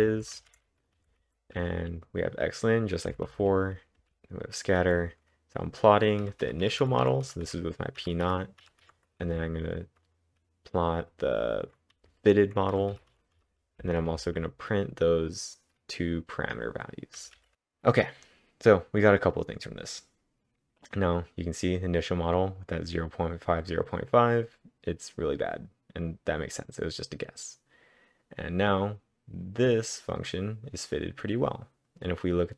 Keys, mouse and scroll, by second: 0.0-0.4 typing, 3.1-4.0 typing, 6.0-10.9 typing, 12.0-14.9 typing, 17.4 typing, 17.5 Return, 17.5 Up, 17.5 ctrl+`, 17.5-20.2 drag.